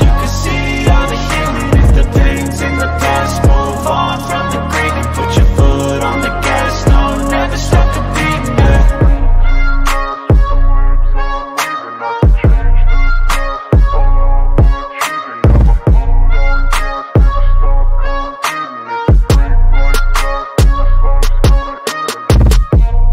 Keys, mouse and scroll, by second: 0.2 click, 1.3 shift+click, 2.6 click, 3.4 click, 4.9 click, 6.3 ctrl+click, 7.2 click, 7.9 ctrl+click, 9.1 ctrl+c, 9.3 ctrl+v, 10.8-11.9 drag, 12.0 ctrl+z, 13.1 click, 14.9 click, 15.9-18.1 drag, 20.1 click, 21.0 click, 22.2 middle click, 22.2 scroll down 1.